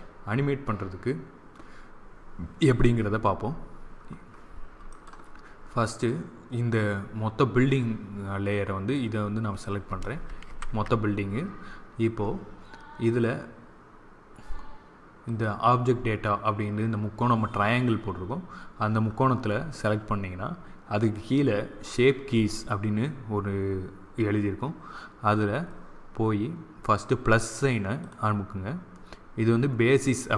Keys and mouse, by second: 4.8-6.5 right drag, 8.8-10.8 drag, 10.4 ctrl+z, 15.1-16.9 drag, 18.6-21.8 middle drag, 21.8-24.7 drag, 27.9-29.7 drag.